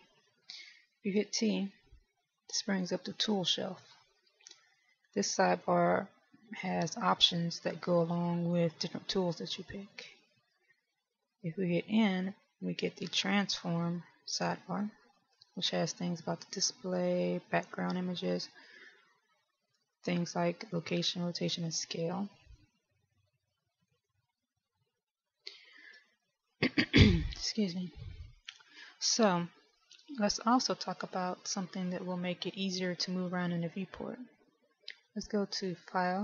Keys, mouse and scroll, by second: 1.3 t, 3.0 click, 5.8 click, 11.7 n, 13.4 click, 18.9 click, 23.8 n.